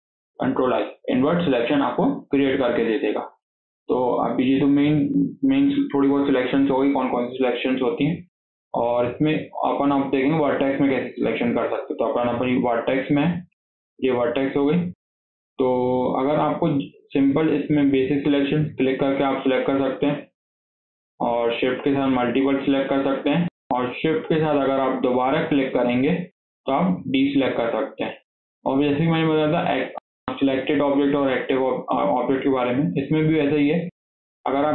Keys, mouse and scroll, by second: 4.1 click, 7.7 scroll up 4, 8.0 shift+middle click, 8.8-9.1 scroll up 3, 9.1-11.0 shift+middle drag, 11.0 scroll down 2, 11.2-14.2 shift+middle drag, 14.3 scroll up 1, 14.6-17.0 shift+middle drag, 17.0 click, 17.9 click, 18.4-18.9 scroll down 2, 18.9 drag, 19.2 drag, 19.6 drag, 20.0 click, 20.3 scroll down 1, 20.5-21.5 shift+middle drag, 21.5 shift+click, 21.9 shift+drag, 22.3 shift+click, 22.6 shift+click, 22.9 shift+click, 24.6 shift+click, 25.2 shift+drag, 25.7 shift+click, 26.2 shift+click, 26.7 shift+click, 27.3 shift+click, 27.8 scroll down 2, 27.9 shift+middle click, 28.3 scroll up 4, 28.6-33.3 shift+middle drag, 33.3 shift+click, 33.6 shift+drag, 34.0 shift+click, 34.4 shift+click.